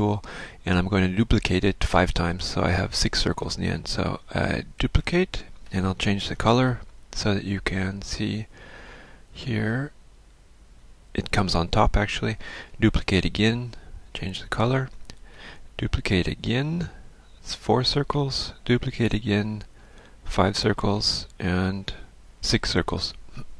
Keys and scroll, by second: 1.0 F1, 5.0 ctrl+d, 6.9 ctrl+shift+f, 12.8 ctrl+d, 16.4 ctrl+d, 19.0 ctrl+d, 21.5 ctrl+d.